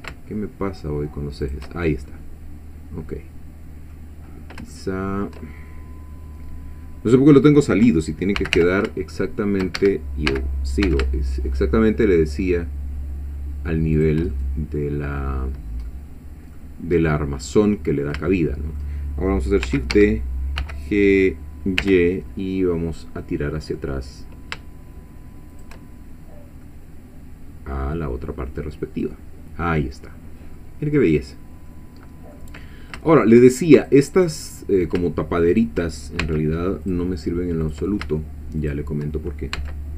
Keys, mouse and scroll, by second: 1.5 shift+click, 1.8 shift+scroll down 1, 2.1-4.1 shift+middle drag, 4.3 scroll up 1, 4.7 shift+middle click, 8.4 g, 8.6 y, 9.8 Escape, 10.3 g, 10.9 x, 14.0 shift+click, 14.3-15.4 shift+middle drag, 15.9 middle click, 17.1-18.2 middle drag, 18.3 shift+middle click, 19.0-19.7 shift+scroll up 1, 19.7 shift+scroll up 1, 19.7 shift+d, 19.9 Escape, 20.6 g, 21.8 y, 25.5 shift+click, 26.4 scroll down 1, 26.6-30.8 middle drag, 31.3 scroll down 1, 31.7 middle click, 32.6 scroll up 2, 33.1 shift+middle click, 33.8 shift+click, 34.2 shift+click, 34.6 shift+click, 35.5 shift+click, 36.2 shift+x, 36.9 click, 37.6 click, 38.6 shift+click, 39.6 x.